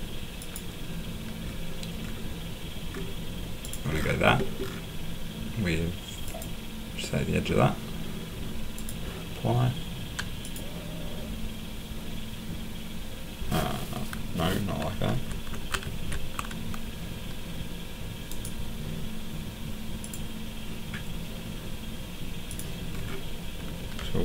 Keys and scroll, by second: 15.1 ctrl+z, 15.8 ctrl+z.